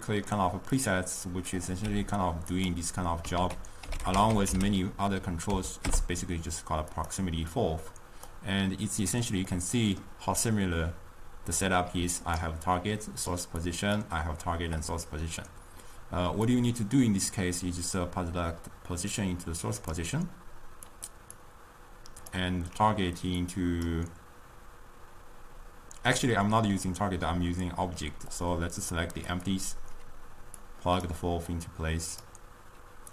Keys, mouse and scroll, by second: 1.0-2.2 drag, 2.2 g, 3.5 ctrl+a, 7.6 click, 9.6-12.0 middle drag, 12.0 d, 12.3 click, 12.5 d, 13.0 click, 13.4-14.9 d, 16.5-19.7 drag, 21.2 click, 21.4-23.5 drag, 28.3 click, 30.7 click, 31.5-33.1 drag.